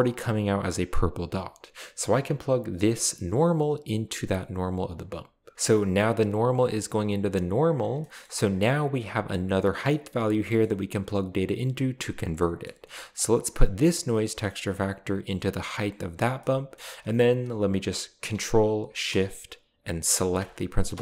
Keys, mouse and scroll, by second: 6.2-7.5 drag, 7.6 click, 8.0-8.6 middle drag, 10.3-10.7 scroll down 2, 12.6 middle drag, 13.1 click, 14.2-15.8 drag, 16.1 click, 16.2-17.3 scroll down 1, 16.4 middle click, 20.4 ctrl+shift+click.